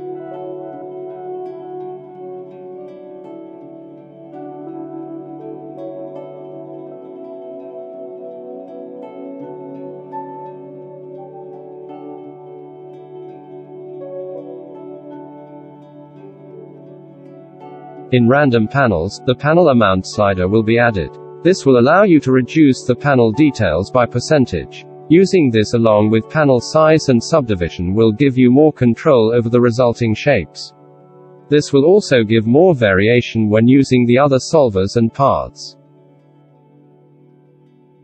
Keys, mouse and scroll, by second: 8.0-9.7 middle drag, 10.2 ctrl+z, 11.0 shift+middle drag, 11.4 shift+q, 27.5 F9.